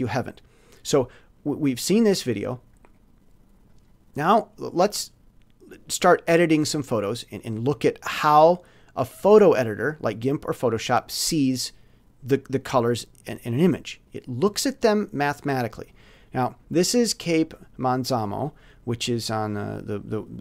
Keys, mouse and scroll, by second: 1.4 click, 1.8 middle click, 1.9 click, 2.8-3.8 middle drag, 6.8-8.9 drag, 12.5-13.8 drag, 18.9 click.